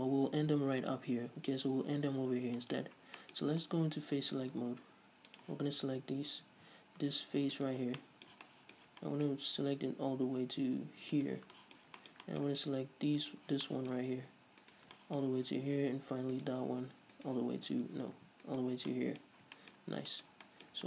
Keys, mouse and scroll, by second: 2.5 scroll down 1, 3.0-3.4 scroll up 1, 5.6-7.8 drag, 7.8 right click, 8.1 scroll down 1, 8.2-11.4 middle drag, 11.4 ctrl+right click, 11.7-13.4 shift+middle drag, 13.4 shift+right click, 13.9-14.9 shift+middle drag, 14.9 ctrl+right drag, 15.2-16.6 shift+middle drag, 16.6 shift+right click, 17.5-18.1 ctrl+right drag, 18.1 ctrl+z, 18.7 ctrl+right click, 19.1-20.8 middle drag, 19.5-19.8 scroll up 2, 20.0 scroll up 2.